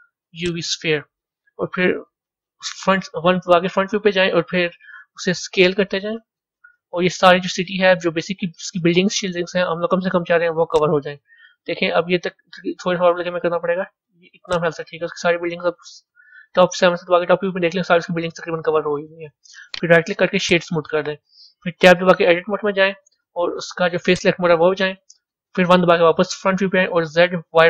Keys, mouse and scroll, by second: 2.7 KP_1, 5.5 s, 11.1-13.5 middle drag, 13.5 s, 15.0-16.0 middle drag, 16.0 KP_7, 16.3-16.8 scroll down 5, 18.5-19.6 middle drag, 19.6-22.2 right drag, 22.2 b, 24.0 click, 25.3 KP_1.